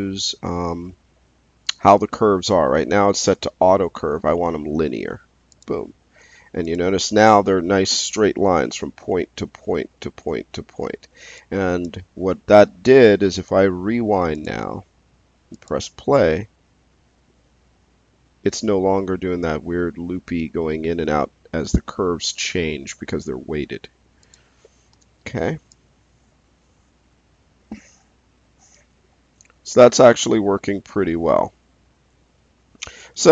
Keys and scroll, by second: 12.4 space, 24.9 space.